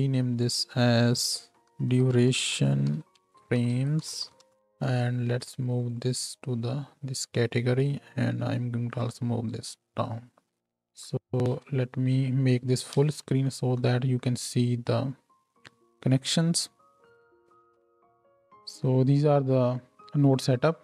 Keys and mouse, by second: 0.8 middle click, 0.8 right click, 1.1-10.6 middle drag, 1.1-3.5 right drag, 10.6 ctrl+h, 10.6-12.9 drag, 10.6 n, 13.1 ctrl+space, 13.1-17.6 ctrl+drag, 13.1 n, 17.4-17.9 middle drag, 17.4 right click, 17.9-20.8 drag.